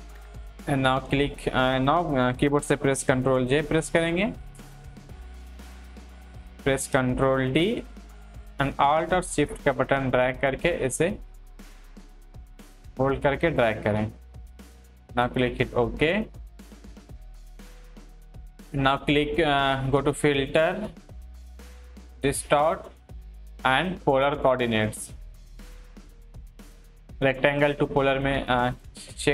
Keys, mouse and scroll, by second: 3.0 ctrl+Num_Lock, 3.4 ctrl+j, 6.4 click, 7.4 ctrl+t, 9.0-20.2 alt+shift+drag, 24.7 click, 28.6 click, 28.7 click.